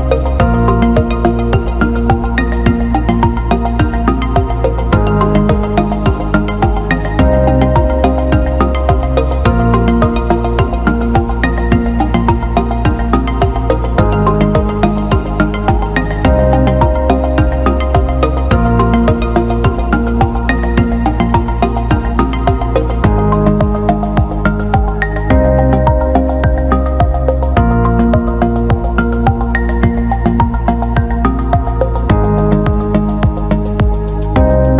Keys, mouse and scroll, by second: 8.2 Tab, 8.6 click, 9.3-11.3 right drag, 11.3 click, 12.4-14.5 drag, 15.6 click, 17.7 click, 17.9-21.6 drag, 22.8 alt+middle click, 23.1 drag, 24.3 Tab, 25.1-26.2 drag, 26.2 a, 26.9 s, 28.6 alt+shift+middle click, 29.3 Tab, 30.3 click, 31.0 Tab, 32.9 click, 33.6 click.